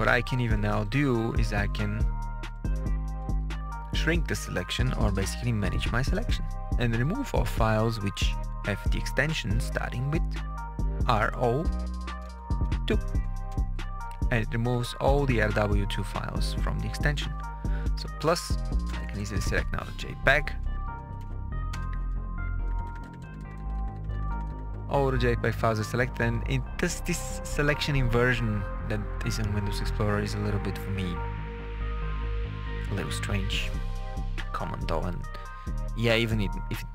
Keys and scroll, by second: 2.5 KP_Subtract, 5.7 Right, 9.3 Left, 10.0 Right, 11.5 1, 12.2 BackSpace, 12.4 2, 13.4 Return, 14.4 Page_Down, 17.7 KP_Add, 18.4 Right, 18.8 BackSpace, 20.3-21.6 typing, 22.5 Page_Up.